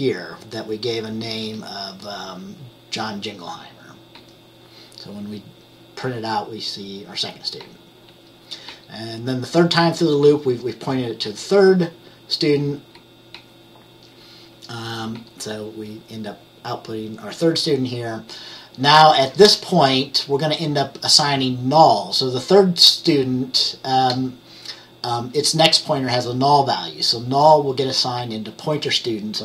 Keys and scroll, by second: 4.2 F10, 7.7 F10, 8.2 F10, 8.7 F10, 11.3 F10, 13.4 F10, 15.2 F10, 28.3 F10.